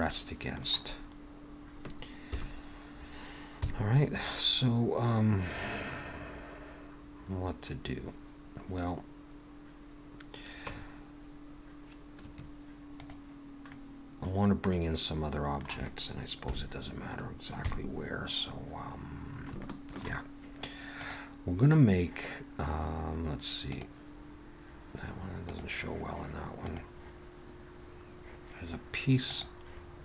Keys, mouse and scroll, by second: 2.1 KP_1, 3.5 KP_3, 10.7 Tab, 12.3 Tab, 12.9 click, 13.7 middle click, 16.4 KP_1, 17.6 KP_3, 18.6-19.1 scroll up 2, 19.1-19.5 scroll down 2, 19.6 shift+middle click.